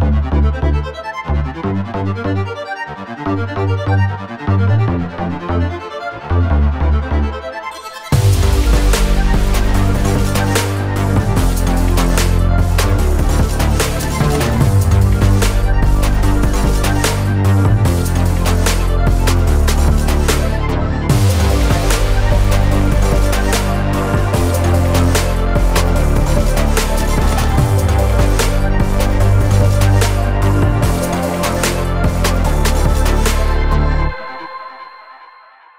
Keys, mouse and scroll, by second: 0.0 click, 0.7-2.8 scroll up 2, 2.8 click, 3.6 click, 5.1 click, 5.8 click, 6.4 Tab, 7.1 middle click, 8.2 click, 9.3 1, 9.8 click, 10.9 click, 13.2 shift+s, 14.5 Tab, 14.9-15.6 middle drag, 15.8 shift+a, 24.9 BackSpace, 25.4 9, 26.4 0, 26.9 Return, 28.2 s, 31.9 click, 32.3 Tab, 33.3 click, 34.4 shift+click.